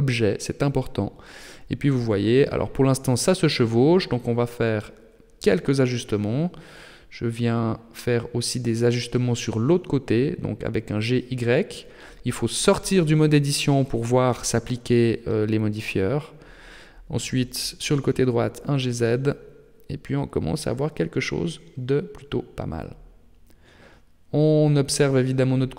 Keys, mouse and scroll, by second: 1.4 g, 5.7 Tab, 6.8 Tab, 7.2 Tab, 7.5 right click, 8.5 Tab, 9.2 g, 14.1 Tab, 14.7 right click, 16.0 Tab, 17.1 g, 19.0 Tab, 20.6-21.2 scroll down 3, 21.2-22.2 scroll down 6, 22.4 middle click, 23.2 shift+middle click, 23.8 middle click, 24.6 shift+middle click, 25.2 middle click.